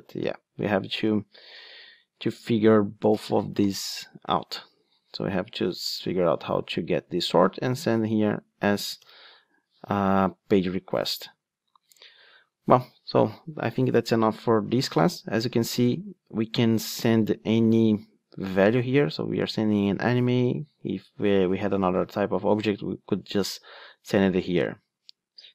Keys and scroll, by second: 9.0 super+p, 15.0 ctrl+Tab.